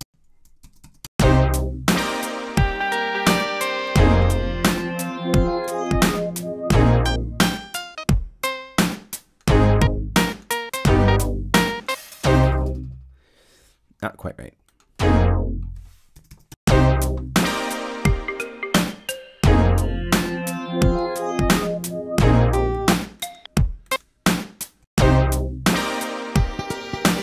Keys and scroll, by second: 0.5 0, 1.0 Return, 16.1 0, 16.4 Return, 24.7 Home.